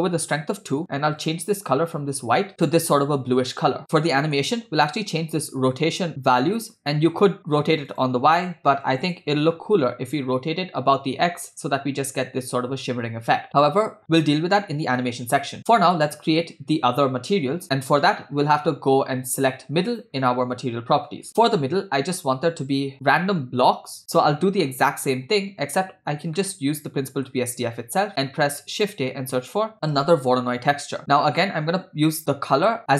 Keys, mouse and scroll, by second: 1.2 click, 4.0 middle click, 4.9-8.1 drag, 8.1-9.2 drag, 10.1-13.5 drag, 16.1 middle click, 17.1-17.6 scroll down 1, 18.3-19.5 scroll up 5, 19.9 click, 21.3 middle click, 21.3 scroll down 2, 24.4 middle click, 26.4 middle click, 27.8 scroll up 2, 28.2 shift+a, 31.4-32.9 drag.